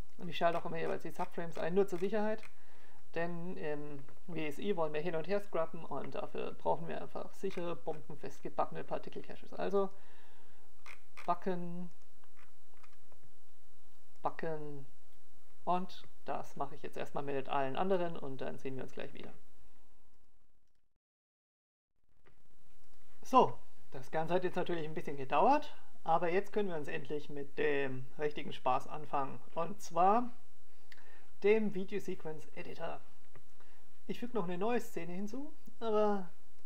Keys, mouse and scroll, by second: 34.2-36.5 drag.